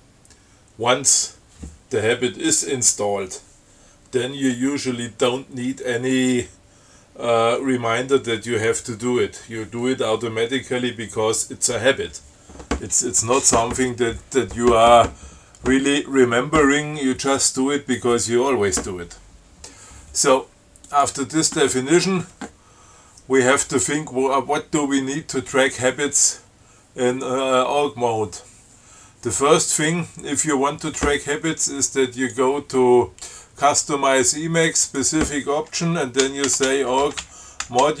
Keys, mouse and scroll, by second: 21.2 click, 32.4 click, 35.1 click, 36.3-38.0 typing.